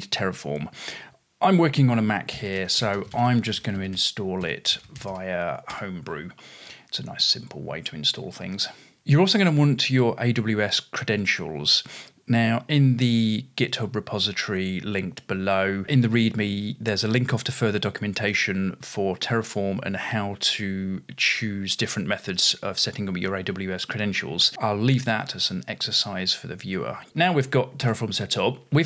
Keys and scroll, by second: 2.1-6.2 typing, 26.8-28.8 typing, 27.8 Return.